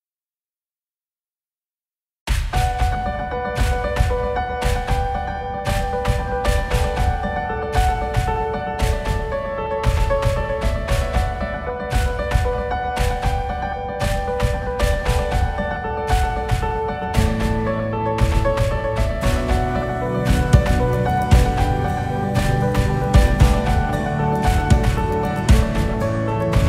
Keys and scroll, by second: 13.8 shift+Down, 14.6 Up, 17.7 ctrl+z.